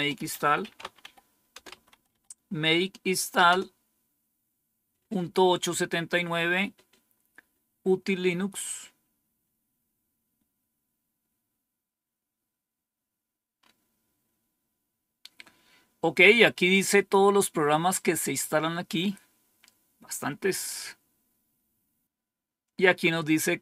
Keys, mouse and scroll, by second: 0.0-2.3 typing, 3.4 typing, 11.4-13.4 scroll down 1, 13.5-15.4 scroll up 2, 15.4-22.0 scroll up 1, 22.7-23.4 scroll down 2, 23.4-23.6 scroll down 1.